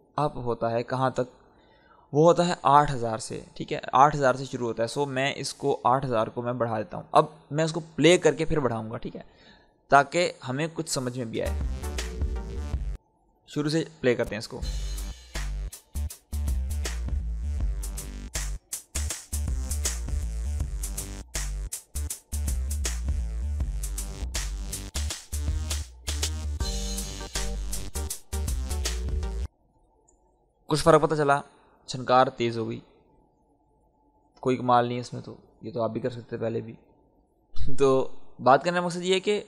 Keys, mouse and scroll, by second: 2.4-5.3 drag, 5.6-8.8 drag, 8.8 scroll down 1, 9.7 click, 10.1-10.9 scroll down 1, 10.9 click, 11.3 space, 13.9 click, 14.5 space, 16.1-26.7 drag, 27.8 Tab, 29.4 space, 37.9-39.4 drag.